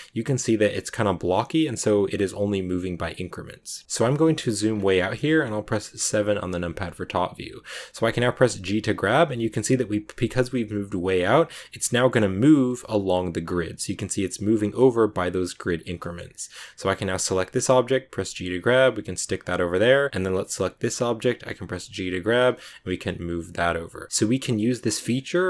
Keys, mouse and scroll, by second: 3.8-4.6 scroll down 4, 4.6 scroll up 2, 6.0 KP_7, 6.6 click, 8.4 g, 14.2 g, 15.9 shift+middle click, 16.8 right click, 18.1 g, 20.2 right click, 22.1 g.